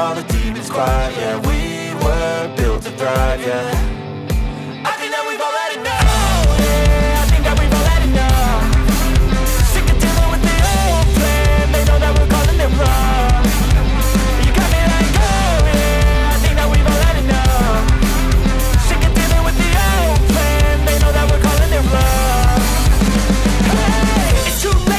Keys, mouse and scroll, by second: 15.1 ctrl+z, 19.2 ctrl+z.